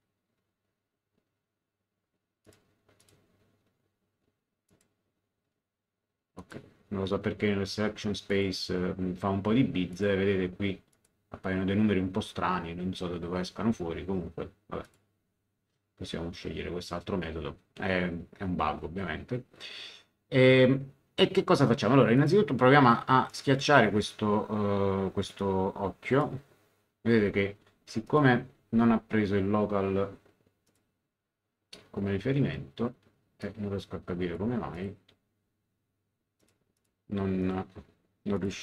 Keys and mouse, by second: 2.4 click, 4.6 click, 6.3 click, 8.3 click, 9.9 click, 10.9 click, 14.8 click, 22.1 click, 23.3 middle click, 25.3 click, 28.0 click, 28.6 ctrl+z, 30.7 click, 33.4 click, 34.7 click, 36.4 click.